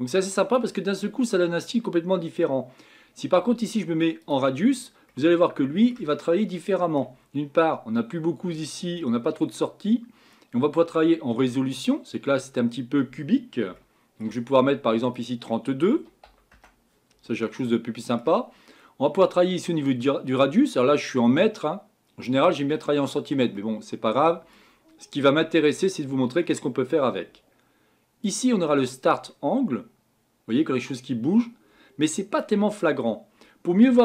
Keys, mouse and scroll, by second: 4.2 click, 5.1-12.5 middle drag, 12.5 scroll up 2, 13.8-16.5 shift+middle drag, 16.5-17.6 drag, 17.6-20.0 middle drag, 20.0-23.6 drag, 23.6-28.4 middle drag, 28.4-31.2 drag.